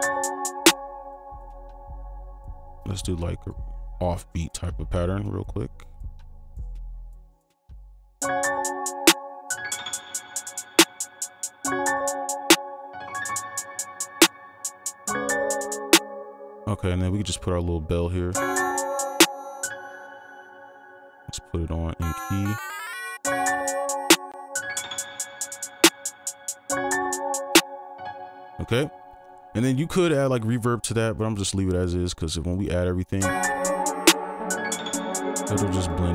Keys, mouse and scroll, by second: 0.7 space, 0.8 scroll down 1, 1.9-2.9 scroll down 2, 3.0 double click, 16.0 space, 18.3 space, 20.1 right click, 23.2 space, 24.8 double click, 28.1 space, 32.6 double click, 35.6 space.